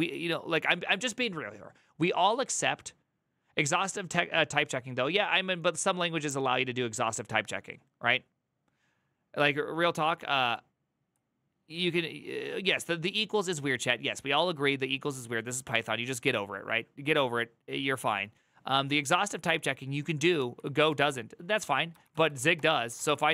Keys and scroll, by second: 20.1 alt+[, 20.7 alt+{, 21.7-23.3 typing.